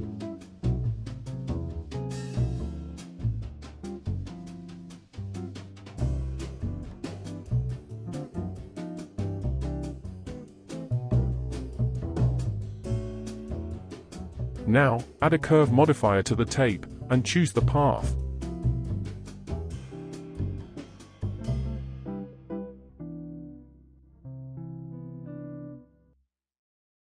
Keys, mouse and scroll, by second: 0.6-3.7 middle drag, 4.7 Tab, 6.1 shift+click, 7.1 shift+click, 7.9 click, 9.1 shift+click, 10.9-11.7 scroll up 2, 12.6 click, 13.2 click, 15.2 click, 15.8-19.3 drag, 19.4-22.4 drag, 25.1-26.9 drag.